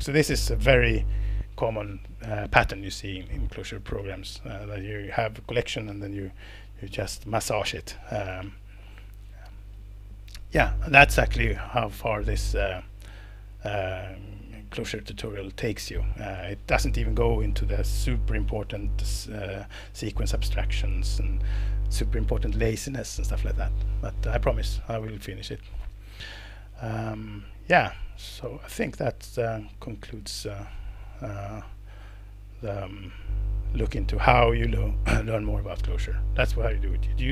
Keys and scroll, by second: 0.1 Escape.